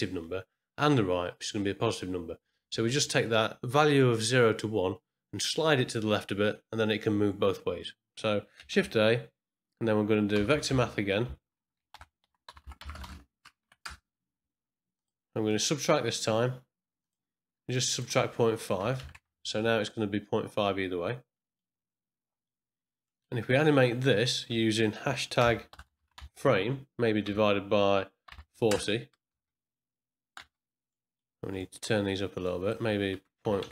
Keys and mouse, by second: 8.7 shift+a, 11.9 shift+a, 15.4-17.2 drag, 17.7-19.9 drag, 21.3 middle click, 23.0 middle click, 24.2-29.8 drag, 29.3 space, 30.4 space, 30.9 middle click, 31.5 middle click, 32.4-33.7 drag.